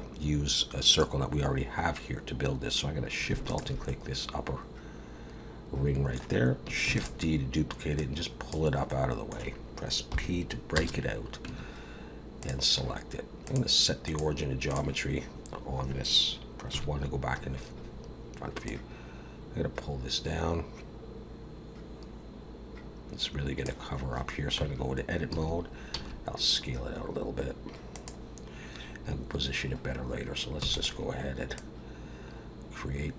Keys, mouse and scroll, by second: 3.5 alt+shift+click, 3.9 middle click, 6.8 shift+d, 7.9 click, 8.9 middle click, 10.1 p, 11.4 Tab, 12.4 click, 13.4 click, 16.7 KP_1, 17.4-18.7 scroll up 1, 18.7 click, 24.6 Tab, 25.3 a, 25.9 s, 30.6 e, 31.5 click.